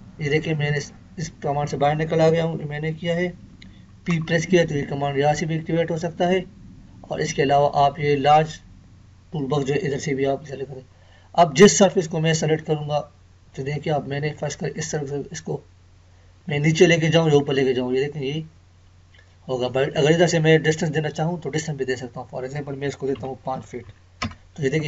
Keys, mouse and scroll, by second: 4.1 p, 12.8-13.2 scroll up 1, 14.8 click.